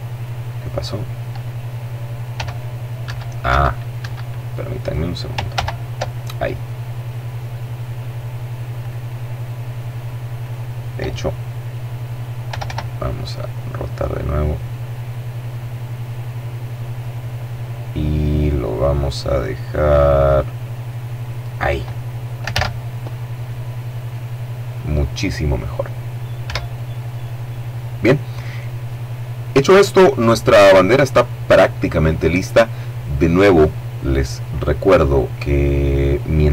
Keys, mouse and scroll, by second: 1.6 s, 2.3 Escape, 4.0 right click, 4.8 ctrl+z, 8.0 right click, 9.6 right click, 11.6 r, 20.6 click, 21.7 alt+a, 25.6 Escape.